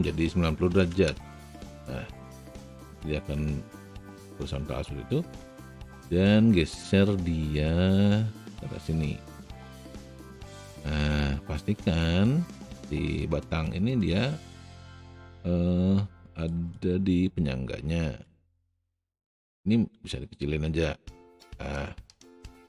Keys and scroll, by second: 0.7 KP_0, 1.0 Return, 4.0 w, 19.7 r.